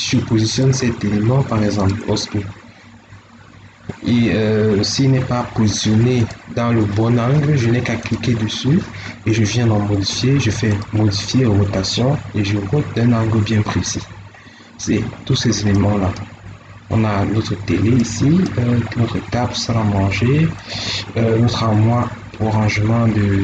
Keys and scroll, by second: 14.3 Escape, 19.2 Escape, 21.6 Escape.